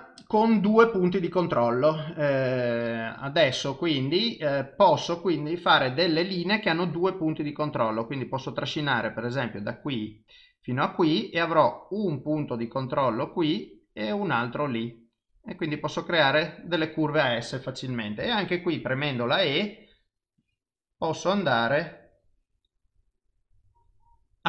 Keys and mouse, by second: 7.8 click, 8.9 click.